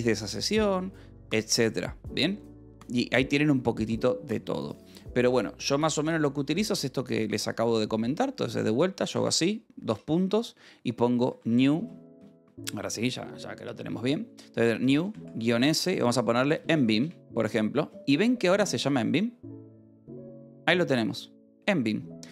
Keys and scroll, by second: 2.1 ctrl+b, 2.1 o, 8.9 ctrl+a, 9.7 :, 10.8-11.7 typing, 15.0-17.1 typing.